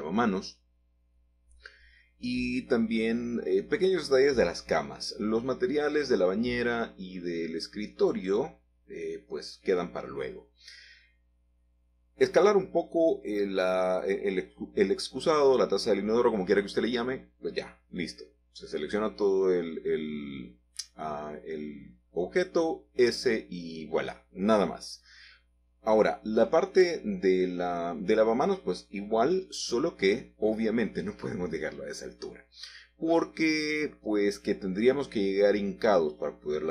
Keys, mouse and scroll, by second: 3.0 Escape, 3.6 ctrl+z, 4.1 middle click, 6.0 g, 6.5 Escape, 7.2 s, 11.0 click, 11.4-15.0 middle drag, 15.8-17.6 middle drag, 17.2 click, 17.8 middle click, 18.6 middle click, 19.7 g, 20.2 x, 22.0 click, 22.7 click, 23.1 middle click, 23.8 middle click, 24.3-24.8 scroll up 2, 25.3 shift+click, 27.0 s, 28.4 click, 29.1 g, 29.5 z, 33.7 click, 34.1-36.2 middle drag.